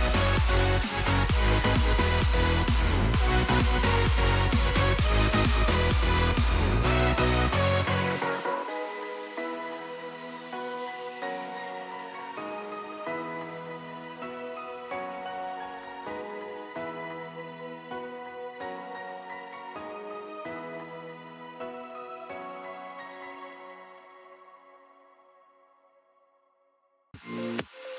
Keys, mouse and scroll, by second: 2.0 middle click, 7.8 scroll down 1, 8.2 middle click, 9.2 right click, 27.8 right click.